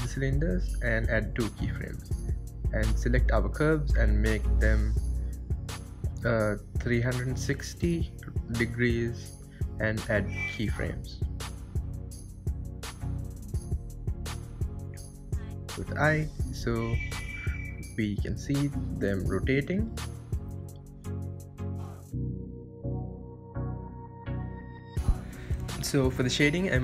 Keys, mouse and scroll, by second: 1.6 click, 4.5-5.8 drag, 6.0-8.7 drag, 8.7-10.2 right drag, 10.2 click, 11.5-13.3 drag, 13.3-14.8 right drag, 14.8 space, 18.2-18.6 scroll up 1, 22.4-23.4 scroll up 1, 23.8 n.